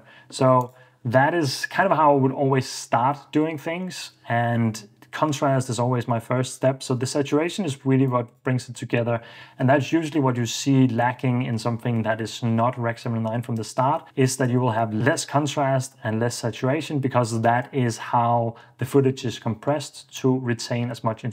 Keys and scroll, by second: 8.9 super+f, 14.8 super+d, 20.4 super+d, 21.1 Escape.